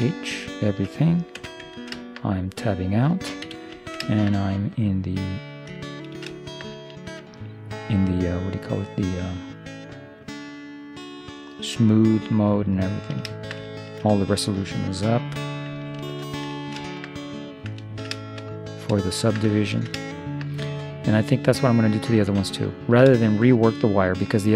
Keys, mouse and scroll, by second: 0.7-1.9 middle drag, 1.5 Tab, 3.5 middle click, 3.5 z, 6.2-10.2 middle drag, 10.4 middle click, 12.8-15.9 middle drag, 16.1 ctrl+3, 16.7-24.5 middle drag.